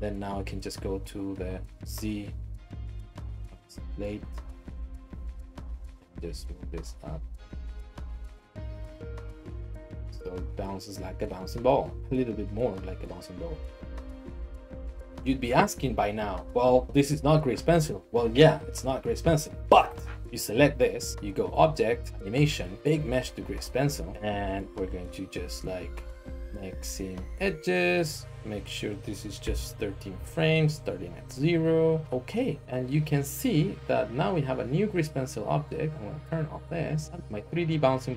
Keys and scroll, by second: 6.3 g, 7.3 r, 8.5 g, 10.2-12.0 typing, 13.5 g, 15.0 g, 19.9 Escape, 20.2 Tab, 29.0-29.5 typing, 29.7 Return, 37.2 Tab.